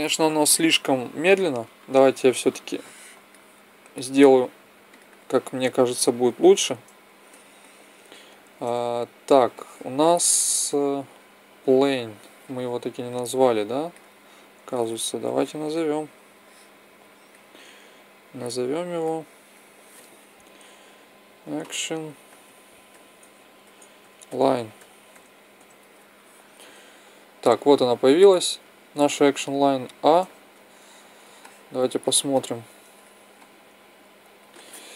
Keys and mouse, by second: 1.5 Escape, 2.2 click, 4.8 click, 7.3-11.6 drag, 13.1 click, 15.0-17.7 drag, 15.0 n, 18.0-21.0 drag, 27.8-29.6 drag, 29.6 a, 30.5-33.1 middle drag.